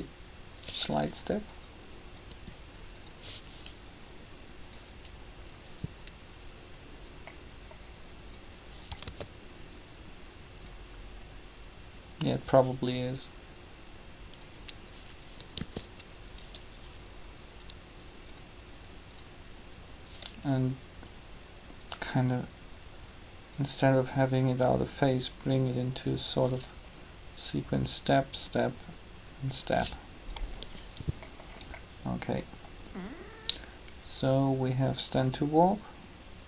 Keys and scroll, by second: 2.3 r, 9.0 alt+a, 15.6 shift+d.